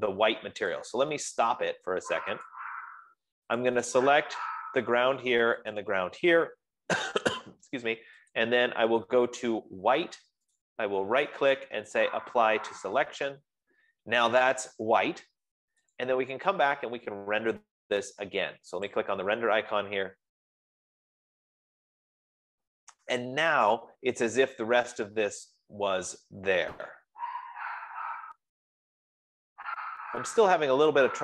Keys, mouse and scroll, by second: 1.3 click, 3.0 click, 4.0 click, 6.3 shift+middle click, 9.8 click, 11.1 click, 12.0 scroll, 13.8 right click, 13.8 click, 16.6 right click, 17.4-24.1 drag, 28.8 F15.